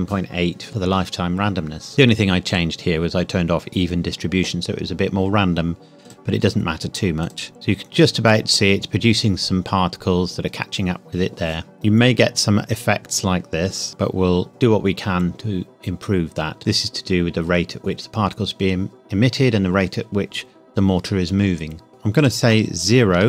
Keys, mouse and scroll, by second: 2.5 click, 6.0 click, 7.7-8.3 scroll up 1, 11.7 scroll down 1, 12.0-13.9 scroll up 1, 22.1 click, 23.1 KP_0.